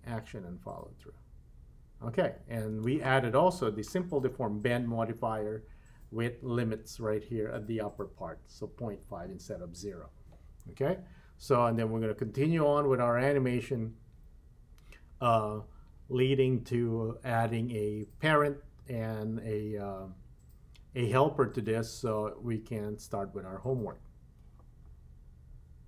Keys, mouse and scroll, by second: 2.8 space.